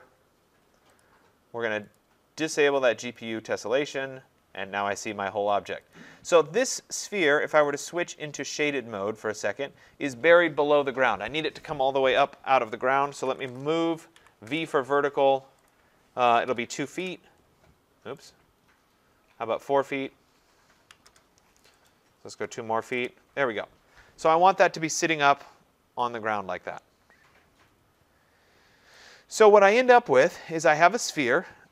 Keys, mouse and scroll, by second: 1.0 click, 2.0 click, 3.2 click, 6.0 click, 7.6 click, 8.5 click, 12.9-14.5 typing, 15.7 click, 16.2-17.0 typing, 18.3 right click, 20.9 v, 21.1 Return, 21.9 click, 22.5-22.8 typing, 22.9 Return, 24.8-26.8 drag, 28.9 right click, 29.4 middle click, 29.5 middle click, 31.2 right click.